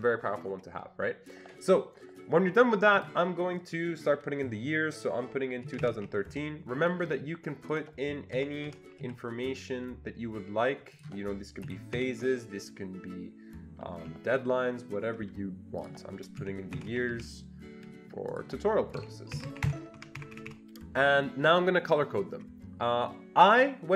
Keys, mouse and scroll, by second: 3.0 click, 5.4-6.8 typing, 7.7 click, 8.8-9.5 typing, 10.9 click, 13.9 typing, 15.8 click, 16.4-17.6 typing, 18.3 click, 19.4-20.1 typing, 20.2 Escape, 20.3 Escape, 20.5 Escape.